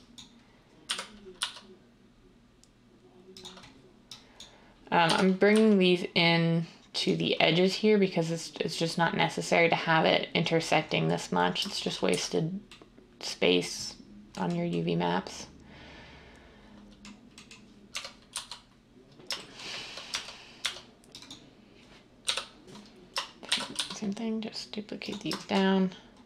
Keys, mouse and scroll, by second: 0.8-1.3 typing, 5.0 g, 12.0 z, 17.8-18.2 typing, 20.0 Tab, 20.6 Tab, 22.2-23.9 typing.